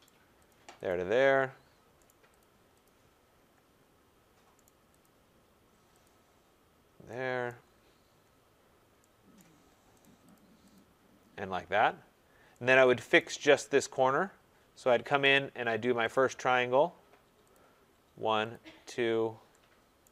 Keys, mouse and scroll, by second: 0.0 right click, 0.4 click, 0.8 click, 2.0 right click, 2.3 click, 2.8 click, 3.6-4.3 scroll, 4.6 right click, 5.0 click, 6.0 click, 7.4 right click, 7.8 scroll, 9.3 right click, 10.0 right click, 10.3 click, 10.7 click, 11.2-11.9 scroll, 13.1 right click, 13.7-14.0 scroll, 16.1 click, 16.5 scroll, 17.5 click, 18.5 click, 20.0 right click.